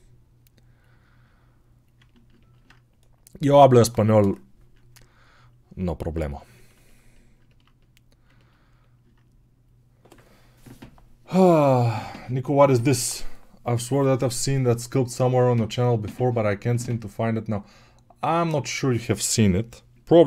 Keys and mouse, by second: 2.3-20.2 ctrl+alt+drag.